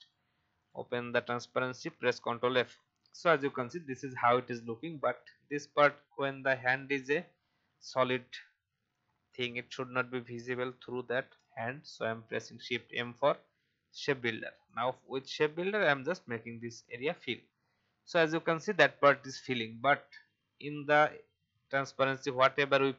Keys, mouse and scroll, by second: 1.6 ctrl+f, 3.9 click, 4.8 alt+scroll up 1, 8.9 click, 11.1 shift+m, 14.6-15.9 drag, 16.4 v, 17.0 click, 17.6-18.1 alt+scroll down 1, 18.3-19.8 alt+scroll down 1, 21.0-22.9 drag.